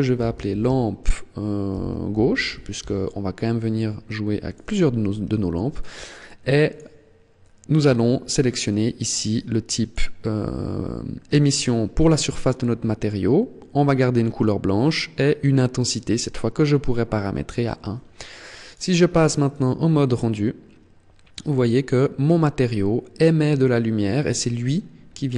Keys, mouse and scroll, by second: 6.4 click, 18.4 click, 24.6-25.1 scroll up 3.